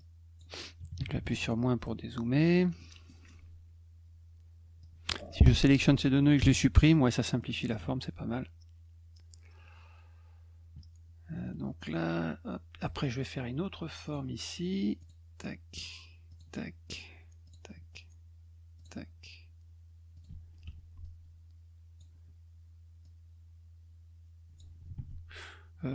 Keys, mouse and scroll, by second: 0.0 click, 1.8 middle click, 2.4 middle click, 2.8 middle click, 4.8 click, 7.4 middle click, 14.1 click, 15.0 click, 16.3 click, 17.4 click, 18.8 click, 20.1 click, 20.6 F2, 21.0 click, 23.0-24.6 drag, 24.9 ctrl+z.